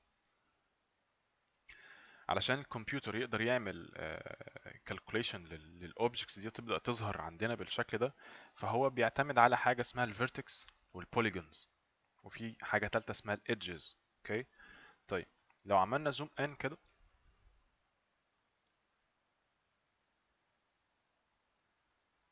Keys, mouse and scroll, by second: 0.3 right click, 16.9 right click, 18.9 right click.